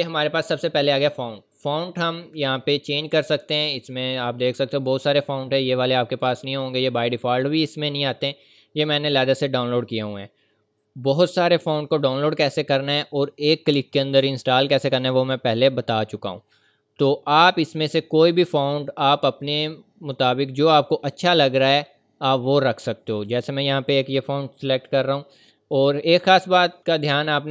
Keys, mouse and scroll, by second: 2.0-2.3 scroll down 1, 7.7 scroll down 1, 20.6-21.4 scroll down 1, 23.3 click, 26.3 click.